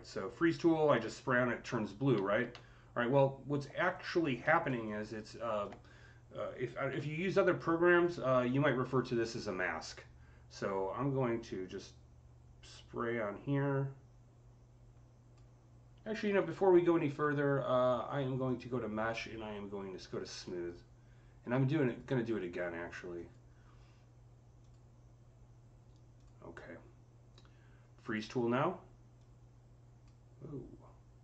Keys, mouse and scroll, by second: 0.3-2.9 alt+drag, 2.3 z, 2.9 scroll up 3, 3.7 alt+click, 4.3 alt+middle click, 4.7-7.3 alt+drag, 6.8-7.7 typing, 9.7-19.8 drag, 9.7 typing, 16.1 ctrl+z, 19.8 click, 21.7 click, 29.0-31.2 drag.